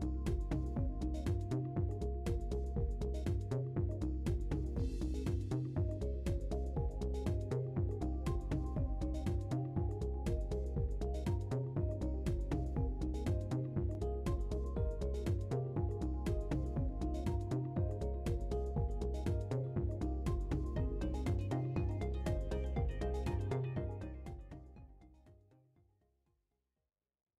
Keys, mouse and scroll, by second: 0.2 scroll up 1, 0.8-3.2 middle drag, 4.0-5.8 drag, 6.0-7.5 middle drag, 8.9-10.3 middle drag, 14.1 <, 15.4-16.5 middle drag, 16.5 scroll up 1, 16.7 middle click, 17.3-19.9 scroll up 1, 19.9 F10, 19.9-20.7 scroll up 1, 21.2-21.9 middle drag, 21.9 scroll down 1, 22.5-24.0 middle drag, 27.2 click.